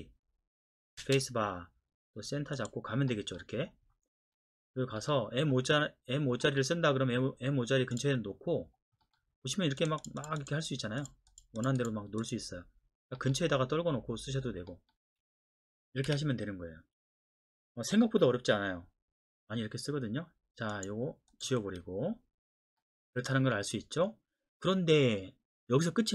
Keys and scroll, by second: 1.0 space, 16.1 Escape, 21.6 Delete.